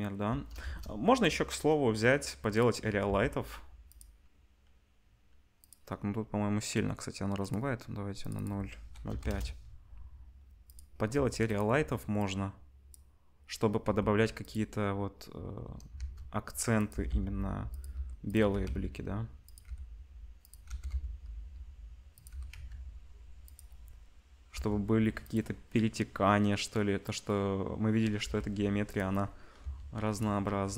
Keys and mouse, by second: 0.6 shift+a, 3.0 g, 5.5 click, 7.4 click, 8.2-10.7 drag, 10.7-12.2 middle drag, 11.1 s, 12.2-14.6 drag, 13.8 g, 14.6-16.9 middle drag, 15.9 shift+d, 16.9 g, 17.9 g, 18.4 r, 19.6 g, 20.6 g, 22.3 g, 24.5 g, 28.2 g, 29.6 s, 30.6 g.